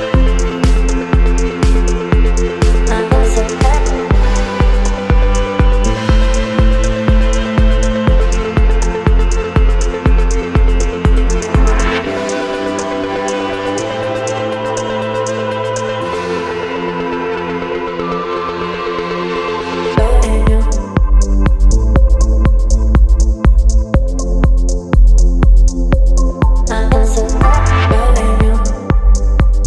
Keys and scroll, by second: 1.0 space, 1.9 e, 3.2-3.7 typing, 5.5 space, 9.3 space, 10.7 space, 11.7 v, 17.7 e, 18.1 ], 20.2 [, 23.3 ctrl+z, 28.1 ctrl+z.